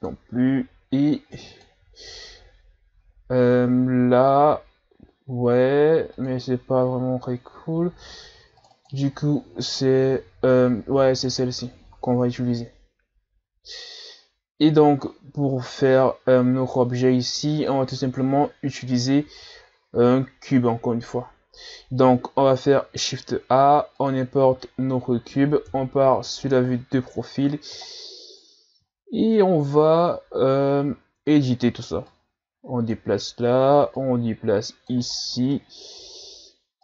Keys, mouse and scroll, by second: 0.0-0.4 drag, 6.2-6.9 drag, 8.9 click, 11.3-20.9 middle drag, 20.9-22.2 scroll down 4, 21.3 middle click, 22.5 shift+a, 24.6-25.7 middle drag, 25.7 KP_3, 26.5-27.3 scroll up 5, 27.3-27.9 scroll up 3, 27.9-28.3 scroll down 4, 28.4-28.9 scroll up 1, 28.9-29.3 scroll up 2, 30.3-31.2 scroll up 1, 31.2 Tab, 32.1-35.2 drag, 35.2-35.6 scroll down 5, 35.6-36.8 middle drag.